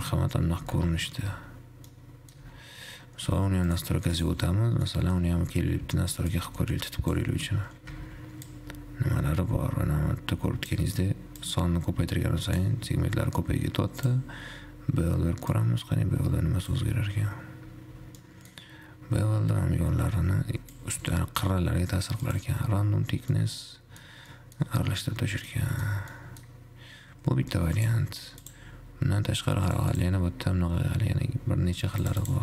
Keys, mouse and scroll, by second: 0.2-0.9 scroll up 5, 0.9 shift+z, 1.4 Tab, 2.1 middle click, 2.7 Tab, 3.9 click, 4.4 click, 4.9 scroll down 5, 5.1-6.5 middle drag, 6.5-8.4 shift+drag, 8.4 shift+z, 8.9-13.2 drag, 13.2 shift+z, 13.6-14.7 scroll up 1, 14.9 click, 15.4 shift+z, 15.9-17.9 shift+drag, 17.9 shift+z, 18.4-18.9 middle drag, 18.9-21.1 scroll up 3, 21.1 click, 22.6 click, 23.4 scroll down 2, 23.6-24.4 middle drag, 24.5-25.0 middle drag, 25.0-25.6 scroll up 2, 25.9-28.0 middle drag, 28.7 click, 30.1-32.4 drag.